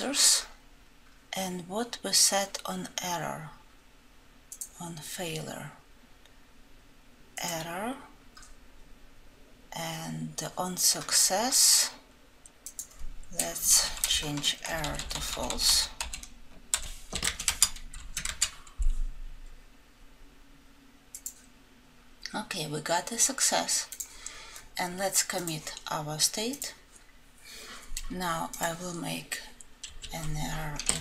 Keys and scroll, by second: 16.6 ctrl+;.